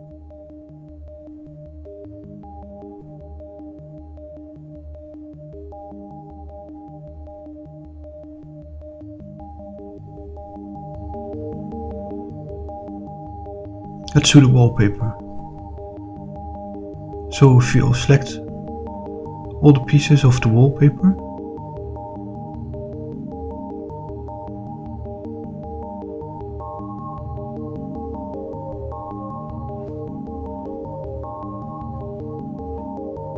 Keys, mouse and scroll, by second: 6.7-9.0 middle drag, 10.1-11.0 middle drag, 12.4 click, 13.0 click, 13.6 scroll down 2, 14.7 click, 15.3 shift+click, 15.9 middle click, 16.7 shift+click, 17.3 middle click, 18.6 shift+click, 19.2-22.9 middle drag, 24.2 shift+click, 25.4 middle click, 27.2-29.0 middle drag, 29.5-32.1 middle drag.